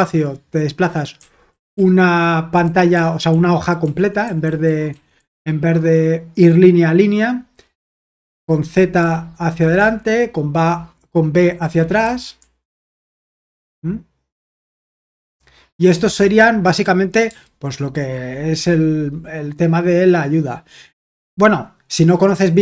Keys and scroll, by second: 1.2-5.1 typing, 9.0-9.8 typing, 12.0-12.4 typing, 17.3 typing.